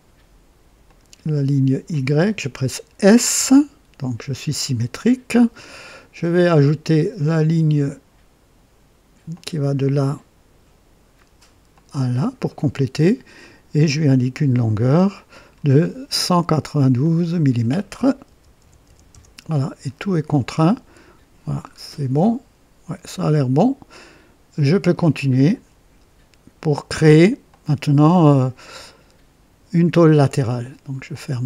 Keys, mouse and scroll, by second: 0.8 click, 1.8 click, 2.2 typing, 3.3 typing, 6.2 click, 9.2 click, 11.6 click, 12.4 right click, 13.3 right click, 15.2 click, 15.8-16.6 typing, 16.9 click, 18.2 KP_1, 18.5 KP_9, 18.8 KP_2, 19.0 KP_Enter, 21.5 scroll down 1, 22.1-23.7 right drag, 22.1 typing, 25.0 scroll down 1, 27.4 click, 31.0 click.